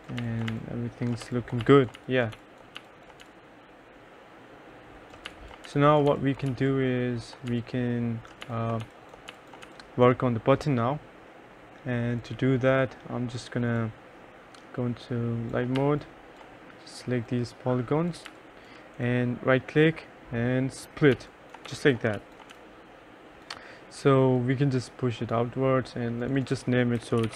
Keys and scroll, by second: 0.3-3.8 typing, 5.1-10.3 typing, 15.9 2, 18.3 3, 21.0-23.1 typing, 26.8-27.3 typing.